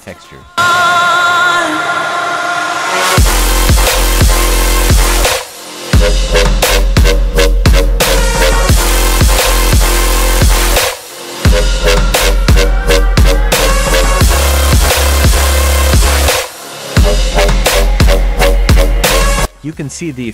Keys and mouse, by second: 1.0 click, 1.9 drag, 6.3 drag, 12.0 middle click, 16.6-19.0 drag.